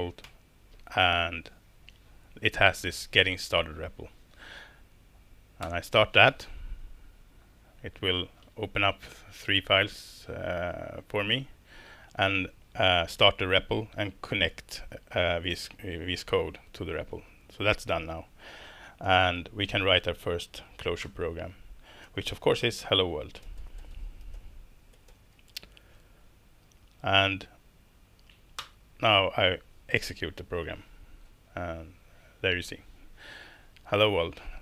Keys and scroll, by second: 0.2 shift+super+p, 5.6 Return, 19.7 super+a, 21.0 BackSpace, 22.0-26.0 typing, 28.6 alt+Return.